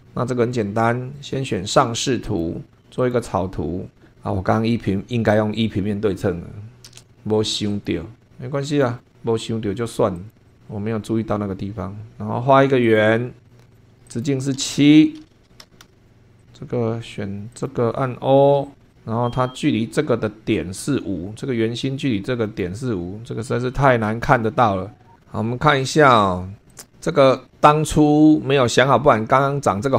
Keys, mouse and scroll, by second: 0.0 super+2, 2.2 click, 3.0 click, 7.7 click, 8.7 click, 10.2 click, 10.5 click, 11.2-11.8 scroll up 1, 12.8 click, 13.5 click, 13.8 click, 13.9 Escape, 14.0 click, 14.6-16.2 typing, 16.4 click, 17.5 click, 18.4 o, 18.9-22.8 drag, 26.7-29.9 drag.